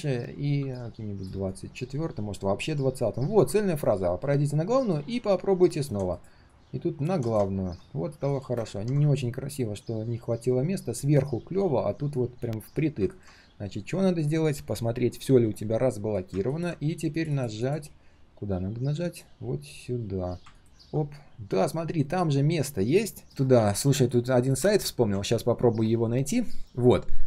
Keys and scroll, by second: 15.3 ctrl+alt+shift+l, 23.5 ctrl+s.